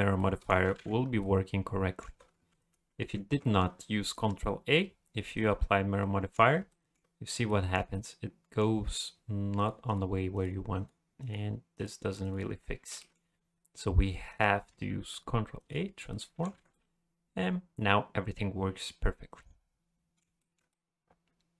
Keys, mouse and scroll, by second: 0.2 middle click, 0.8 alt+a, 1.0 scroll down 1, 1.2 middle click, 2.6 ctrl+z, 2.8 ctrl+z, 3.0 ctrl+z, 3.4 middle click, 4.1 click, 6.0 middle click, 6.7 shift+middle click, 7.5 middle click, 7.9 middle click, 9.6 click, 9.9 click, 10.3 click, 10.8 click, 11.2 click, 11.7 click, 12.2 click, 13.0 middle click, 14.3 click, 15.0 ctrl+a, 16.1 middle click, 16.6 alt+a, 16.7 middle click, 20.4 shift+middle click, 20.7 middle click.